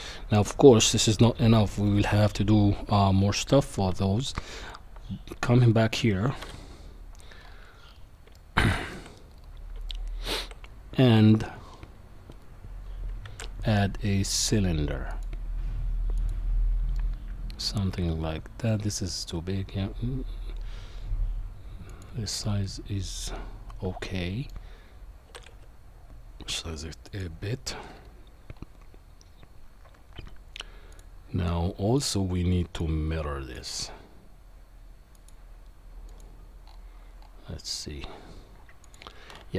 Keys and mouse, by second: 4.0-4.7 middle drag, 6.4 KP_7, 8.3 shift+middle click, 9.9-10.4 shift+middle drag, 13.3 shift+a, 16.9-17.7 middle drag, 17.9 s, 22.4-24.5 middle drag, 25.3 s, 30.9 click, 32.1-33.8 drag, 35.2 click, 38.8 click.